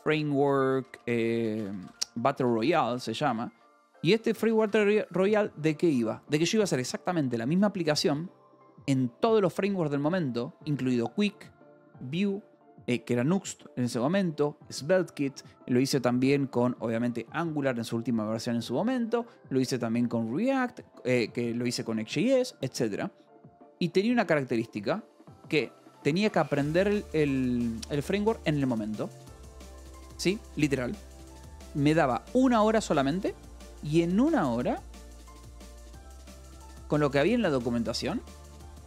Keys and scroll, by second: 0.0-4.8 typing, 7.9 Escape, 26.8 alt+r, 28.1 alt+r, 34.3-36.4 typing, 36.8 Escape, 38.0 v, 38.3 b.